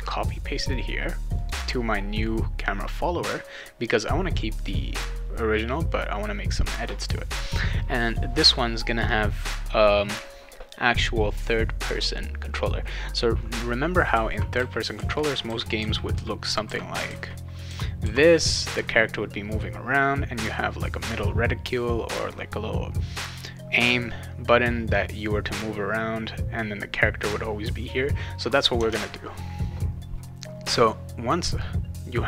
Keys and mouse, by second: 1.4 click, 11.8 click, 13.7-18.5 right drag, 13.9-18.0 typing, 25.0-26.8 right drag, 28.9 alt+Tab.